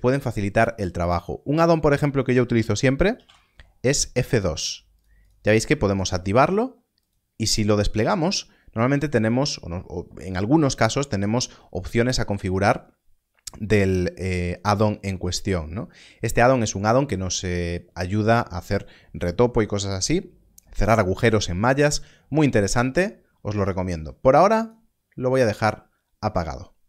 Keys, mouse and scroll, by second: 1.4-3.1 scroll up 1, 3.1 Left, 3.2 2, 4.9 click, 8.8-10.0 scroll down 1, 13.8-15.4 scroll down 1, 15.4-16.2 scroll up 1, 24.5 click.